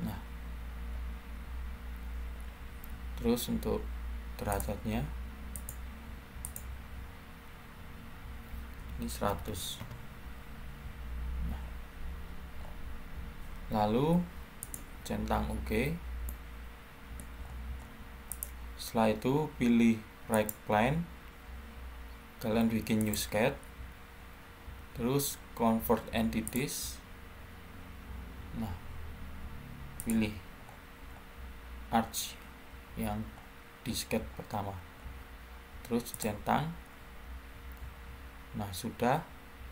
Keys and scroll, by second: 7.2-9.4 typing, 9.7 Return.